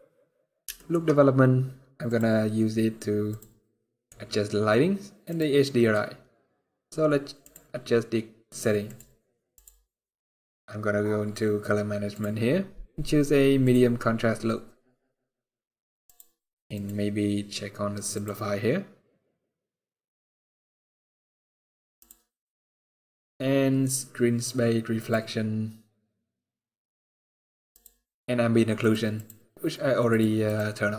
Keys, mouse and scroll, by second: 0.4 shift+middle click, 0.7 scroll up 2, 1.8 click, 3.0 click, 3.6 middle click, 5.0 click, 5.5 middle click, 5.8 scroll up 1, 7.1 click, 7.5 scroll down 1, 8.0-8.4 scroll down 4, 8.5 click, 9.9-10.6 scroll down 2, 11.8 click, 11.8 scroll down 4, 13.0 scroll down 1, 15.7 click, 16.8 click, 16.8-18.5 scroll down 1, 18.5 click, 18.5 scroll down 6, 19.2-20.0 scroll down 2, 20.0-20.6 scroll down 1, 21.0-21.7 scroll down 4, 21.7 click, 21.7 scroll down 1, 27.9 click, 28.9 click, 29.8 click.